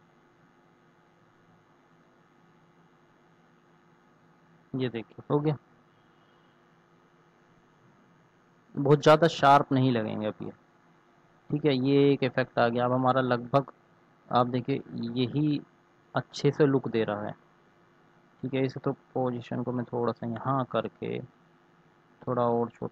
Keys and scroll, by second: 13.8 ctrl+s.